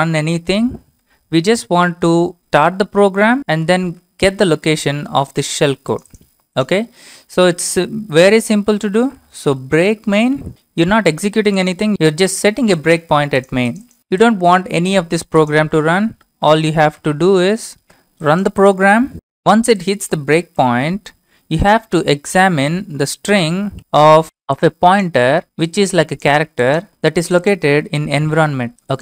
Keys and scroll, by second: 0.1 typing, 2.6 Return, 3.6 y, 4.6 Return, 8.4-11.0 typing, 16.6-17.5 typing, 23.8 ctrl+v.